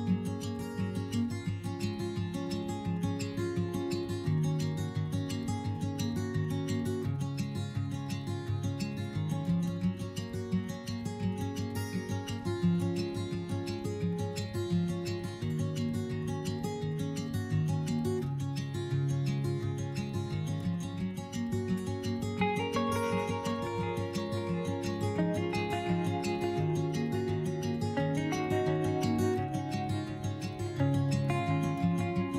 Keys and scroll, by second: 6.2 s, 7.5 4, 11.2 5, 13.4 3, 24.8 s, 28.3 ctrl+z.